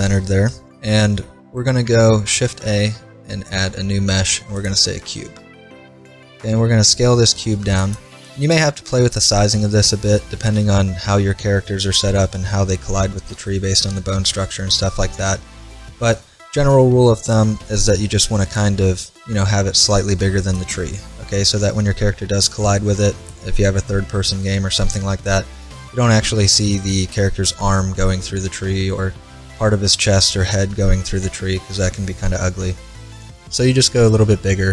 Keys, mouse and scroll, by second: 0.9 middle click, 1.9 middle click, 2.3 shift+a, 6.5 s, 7.6-9.5 drag, 10.2-11.4 middle drag, 18.4 s, 33.5 s.